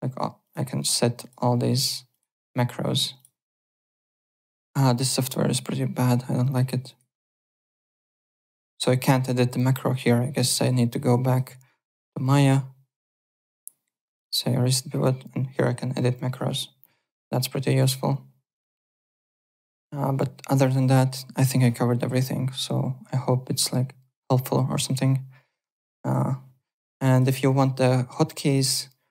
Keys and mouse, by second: 0.4 click, 1.2 click, 2.1 click, 3.1 click, 6.9 right click, 10.5 click, 11.3 click, 14.0 click, 17.7 click, 19.6 click, 20.5 click, 27.1 click.